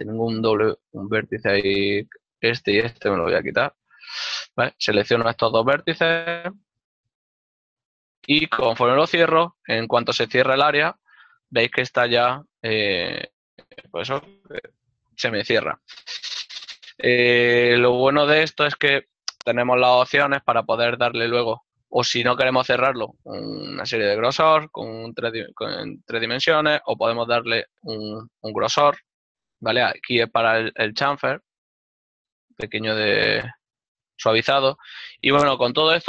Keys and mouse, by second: 0.7 g, 4.1 click, 7.7 right click, 8.7 ctrl+middle click, 11.6 shift+middle click, 12.0 g, 13.9 click, 17.5 middle click, 19.5 shift+middle click, 20.4 click, 27.3 click, 31.2 click, 33.4 click, 33.8 ctrl+middle click.